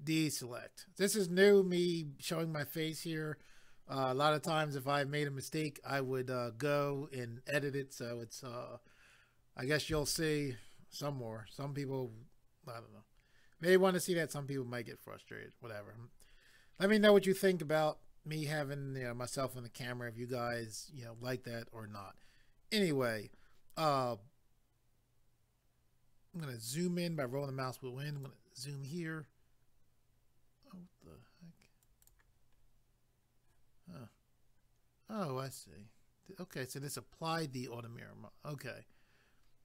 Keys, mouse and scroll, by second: 26.3 scroll up 1, 28.2 click, 29.0 click, 31.8 right click, 32.6 scroll down 1, 35.4 click.